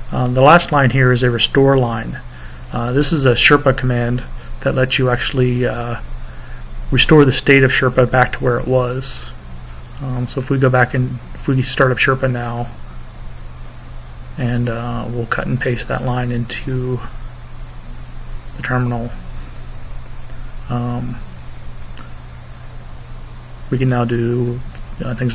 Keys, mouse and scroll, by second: 0.3 click, 3.3 click, 4.8 click, 6.2 click, 7.4 Return, 8.4-9.9 typing, 11.3 Return, 14.1 click, 16.7 click, 17.9 click, 20.0-24.7 typing.